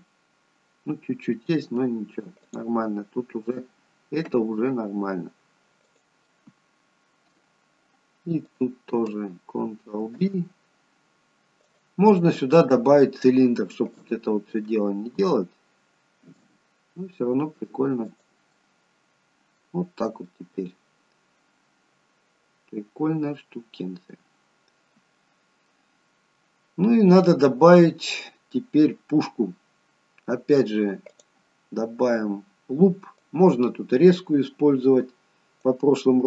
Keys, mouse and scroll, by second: 2.6 click, 4.3 ctrl+b, 6.4 middle click, 8.6 click, 10.1 ctrl+b, 12.3 middle click, 14.0 click, 16.3 ctrl+b, 18.7 middle click, 19.9-21.2 scroll down 3, 20.4 middle click, 24.9-25.3 scroll up 1, 25.3 middle click, 26.4-27.0 scroll down 1, 27.0 scroll down 1, 27.3 middle click, 28.5-29.0 scroll up 2, 29.0-30.1 scroll down 1, 31.2 click, 33.3 click.